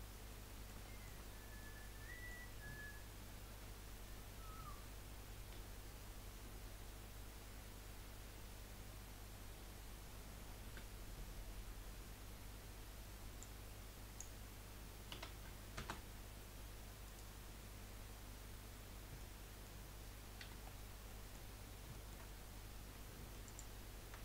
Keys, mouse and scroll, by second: 0.3-3.5 middle drag, 3.5 KP_1, 5.7 z, 8.8 scroll down 3, 9.3-9.8 scroll up 1, 10.4 a, 10.6 a, 13.4 click, 15.1 s, 18.7-19.3 scroll up 2, 19.3-20.4 middle drag, 20.4 2, 20.6-21.1 scroll down 3, 21.1 middle click, 21.5-22.1 scroll up 2, 22.1-23.5 shift+middle drag, 23.5 alt+shift+click.